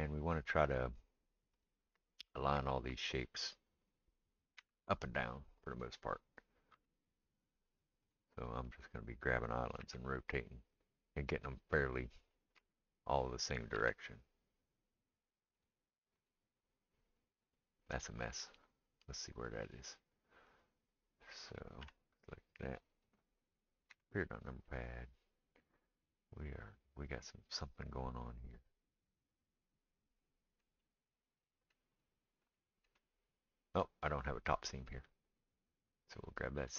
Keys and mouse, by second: 1.5-2.6 drag, 4.6 r, 6.7 g, 8.4 click, 8.5 middle click, 9.8 r, 12.6 f, 13.7 g, 16.3 click, 19.6 click, 20.6 click, 22.4 l, 23.9 KP_Decimal, 32.0 click, 32.0 middle click, 35.3 click.